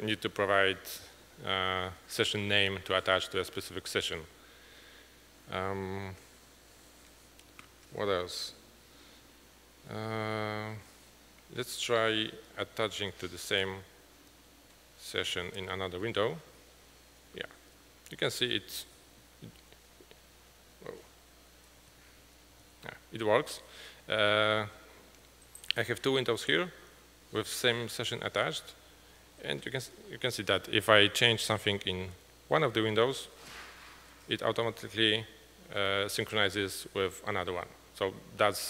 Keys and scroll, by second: 13.7 ctrl+t, 14.7-16.0 typing, 16.3 Return, 19.7 ctrl+Page_Up, 21.9 ctrl+Page_Down.